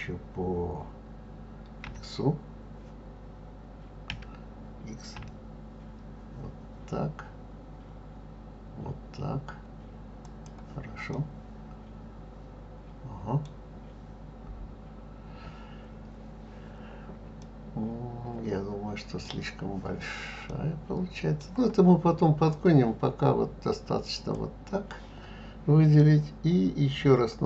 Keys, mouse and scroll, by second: 1.8 x, 4.1 s, 11.1-14.1 middle drag, 17.4-22.5 middle drag, 22.5 click.